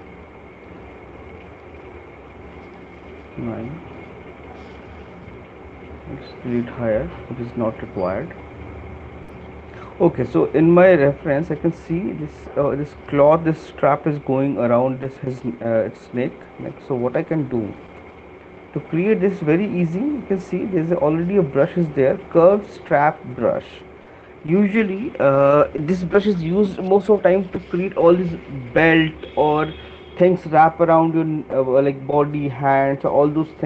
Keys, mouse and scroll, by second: 1.0 click, 2.5 alt+click, 3.0 click, 3.4 9, 6.2 click, 7.3 alt+click, 12.2 click, 18.0 click, 18.8 middle click, 19.4 click.